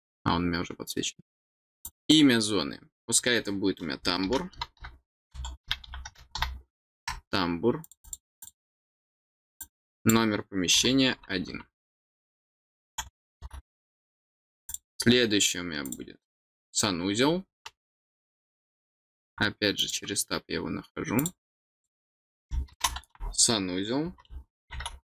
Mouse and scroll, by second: 1.8 click, 7.8 click, 8.0 click, 8.4 click, 9.6 click, 14.6 click, 15.8 click, 19.7 click, 21.1 click, 21.5 click.